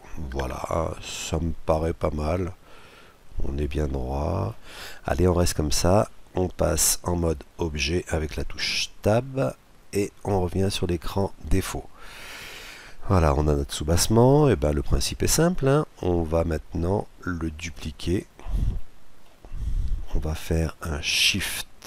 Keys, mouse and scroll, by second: 1.7-3.5 middle drag, 8.6 Tab, 11.2 click, 11.8 middle click, 12.3-14.0 middle drag, 14.7-17.0 middle drag, 17.0-18.7 scroll down 2, 18.3 middle click, 18.7-20.6 middle drag.